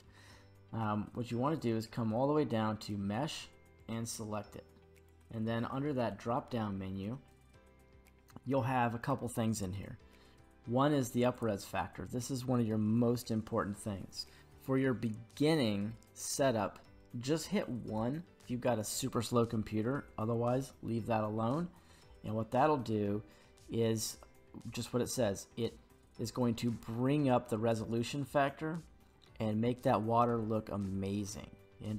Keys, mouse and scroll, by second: 3.8 click, 3.8 scroll down 2, 4.9 click, 7.9 scroll down 1, 11.3-17.9 drag, 11.3-11.6 scroll down 1.